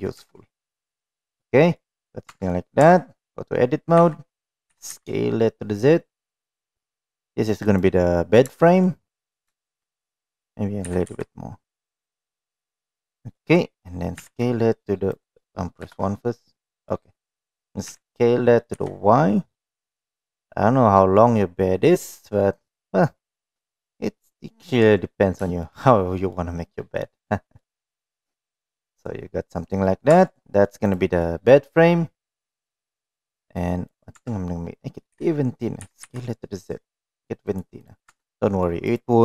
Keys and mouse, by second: 0.3 Tab, 0.7 middle click, 1.2 middle click, 1.9 middle click, 2.5 Tab, 2.7 middle click, 3.4 Tab, 4.1 a, 4.9 s, 8.7 shift+middle click, 9.0 middle click, 9.8 shift+middle click, 10.1 middle click, 11.1 s, 13.1 middle click, 15.3 s, 16.0 KP_1, 17.1 middle click, 18.0 s, 22.8 middle click, 24.3 middle click, 25.0 middle click, 25.7 shift+middle click, 26.3 middle click, 27.2 middle click, 27.9 middle click, 29.3 middle click, 30.5 Tab, 30.6 middle drag, 31.2 click, 31.5-32.2 middle drag, 32.6-33.0 middle drag, 34.6 Tab, 36.1 s, 38.1 click, 38.5 Tab, 38.6-39.0 middle drag.